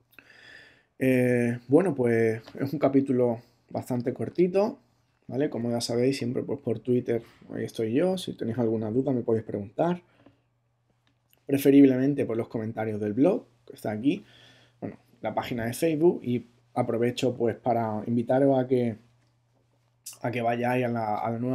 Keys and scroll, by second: 1.7 ctrl+Tab.